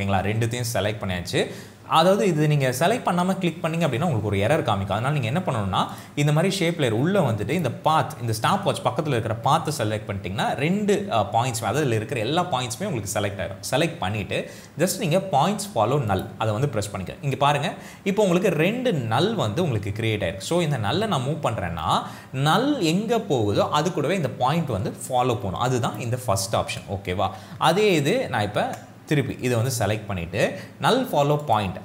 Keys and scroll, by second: 28.1 ctrl+z.